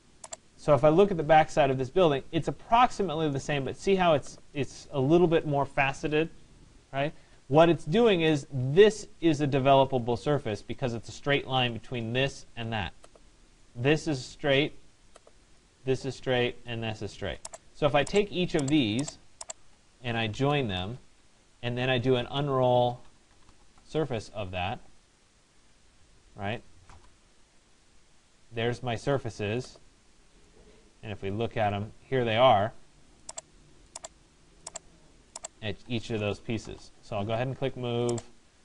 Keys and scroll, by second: 36.3 Return.